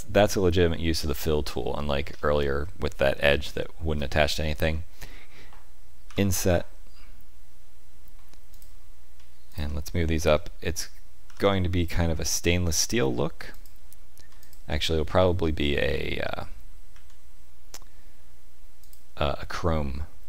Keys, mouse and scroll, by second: 0.5 middle click, 2.0-3.3 scroll up 4, 3.4 shift+middle click, 4.6 middle click, 6.0 i, 9.4 alt+click, 11.2 g, 14.3 alt+click, 16.2 middle click, 16.8 s.